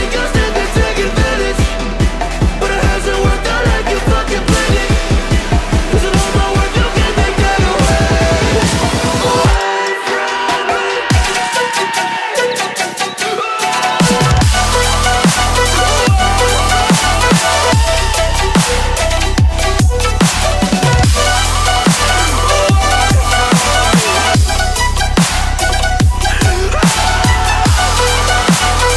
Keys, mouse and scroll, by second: 1.8 click, 3.7 click, 5.3-5.9 drag, 10.2 ctrl+d, 13.5 ctrl+d, 13.8 ctrl+j, 15.4-16.0 drag, 19.5 right click, 20.1 ctrl+click, 20.7 ctrl+t, 21.8 right click, 21.8 right click, 22.9-27.0 drag, 24.0-26.5 drag, 27.0 ctrl+=, 28.1 space, 28.4-28.9 click, 28.6 space.